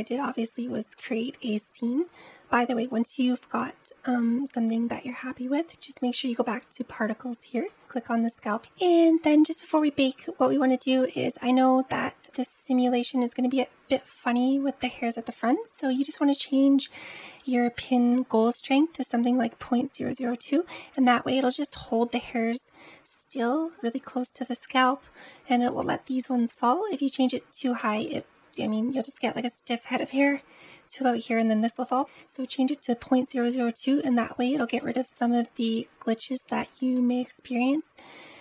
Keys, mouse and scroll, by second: 0.9-3.8 middle drag, 5.8 click, 7.4 click, 8.5-9.1 scroll up 2, 9.6-11.0 scroll down 2, 11.0 scroll down 3, 12.1-12.8 scroll up 3, 12.8-15.6 middle drag, 34.6-36.2 middle drag, 36.2-36.8 scroll up 1, 36.8-38.4 shift+middle drag.